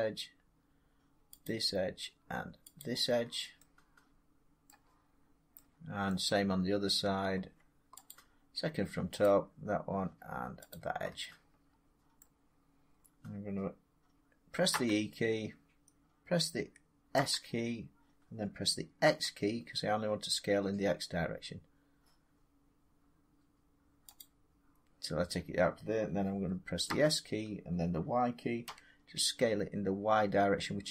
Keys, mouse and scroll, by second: 1.3 shift+click, 2.7 shift+click, 4.5 middle click, 4.7-5.0 scroll, 6.0 scroll, 6.4 middle click, 8.0 shift+click, 9.1 shift+click, 10.6 shift+click, 12.1 middle click, 12.4 scroll, 14.6 e, 17.0 s, 17.4 scroll down 2, 18.9 x, 24.1-29.1 drag, 26.7 s, 28.5 y.